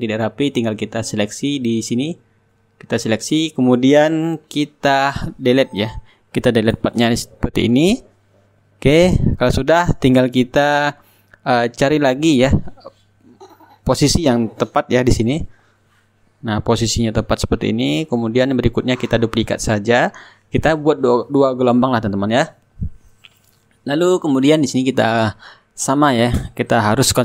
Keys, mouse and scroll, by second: 0.3 click, 0.8 right click, 2.3-9.6 drag, 6.0 right click, 14.3 ctrl+z, 16.0 click, 18.0-25.8 drag, 24.7-25.8 right drag.